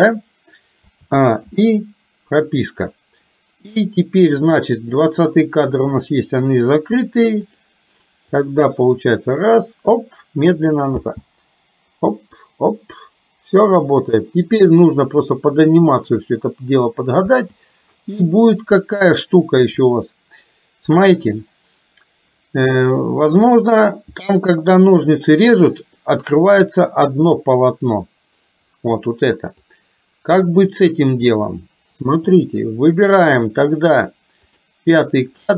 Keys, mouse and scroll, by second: 0.8 a, 1.5 i, 7.6 click, 8.3-10.6 drag, 11.0 space, 17.3 space, 19.2 shift+middle click, 29.7-31.5 drag, 32.1 Delete, 34.6 click.